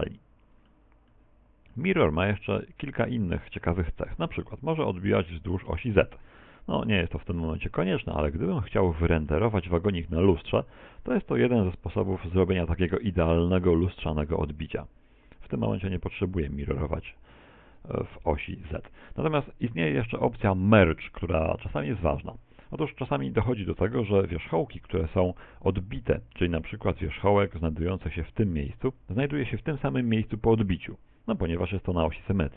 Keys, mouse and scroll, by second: 1.1 middle click, 2.3 shift+middle click, 5.5 click, 6.5 shift+middle click, 8.7 middle click, 9.5 middle click, 10.1 middle click, 10.6 shift+middle click, 17.6 click, 24.6 middle click, 25.2 middle click, 26.5-26.9 scroll up 4, 27.1 ctrl+Tab, 28.2 right click.